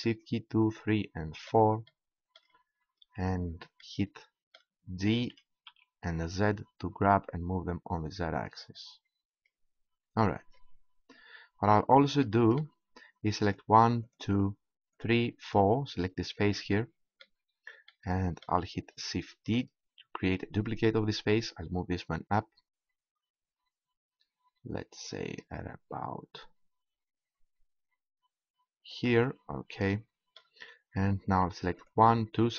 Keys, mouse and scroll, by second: 1.8 middle click, 5.7 g, 8.5-10.6 drag, 10.6-12.7 middle drag, 13.4-17.3 right drag, 17.3-19.5 middle drag, 19.5 shift+d, 29.0-31.8 drag, 31.8-32.5 right drag.